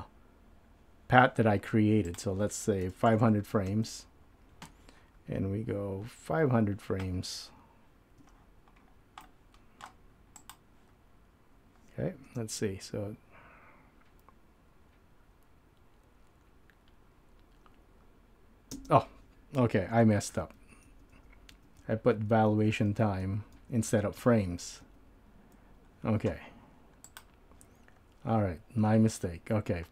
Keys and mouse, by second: 2.2-3.8 drag, 3.2 KP_0, 9.4 middle click, 10.4 click, 12.3 space, 18.9 space, 20.3 super+z, 20.7 super+z, 20.9 super+z, 21.3 super+z, 21.6 super+z, 21.9 super+z, 22.2 super+z, 22.6 super+z, 23.0 super+z, 23.3 super+z, 27.1 click.